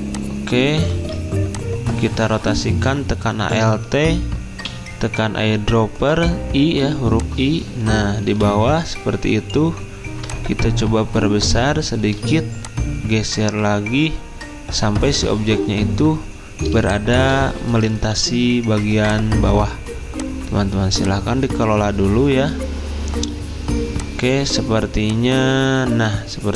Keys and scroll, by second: 1.0 ctrl+z, 4.4-5.2 typing, 8.3 v.